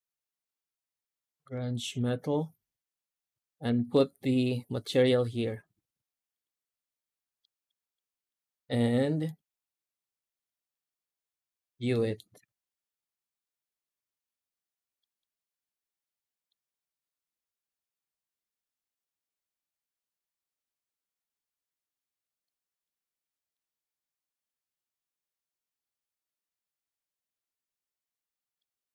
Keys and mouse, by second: 1.8 right click, 3.3 ctrl+shift+x, 7.3 middle click, 7.8 shift+middle click, 9.1 click, 11.8 middle drag, 12.4 z, 14.8 middle drag, 16.1 middle click, 19.8 click, 21.4 click, 22.3 middle click, 23.2 middle click, 25.2 z, 28.4 middle click.